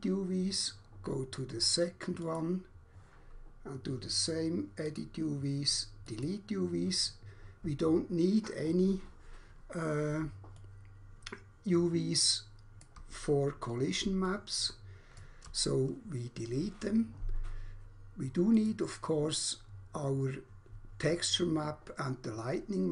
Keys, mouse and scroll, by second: 2.1 click, 5.0 click, 6.1 click, 6.3 click, 9.1 scroll up 1, 10.6 alt+click, 13.4-14.0 scroll down 1, 14.3 alt+click, 18.6 click.